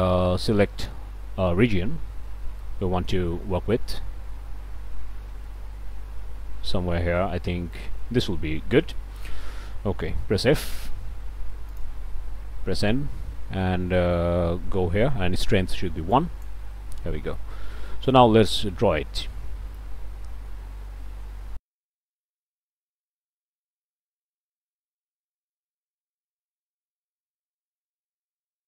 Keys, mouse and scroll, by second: 4.4 n, 5.5-9.1 middle drag, 10.4 f, 11.7 click, 12.8 n, 16.1 click, 19.7-21.7 shift+right drag, 21.7-22.9 right drag, 23.2 right click, 23.4-27.3 drag, 27.4 right click.